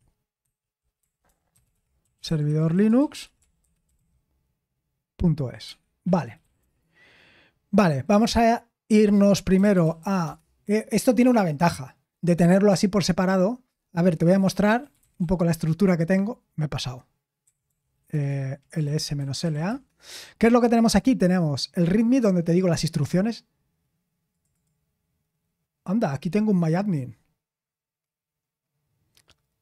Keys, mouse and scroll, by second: 1.8-4.4 typing, 5.6 Escape, 5.8-7.2 typing, 8.2-11.0 typing, 17.1-19.9 typing.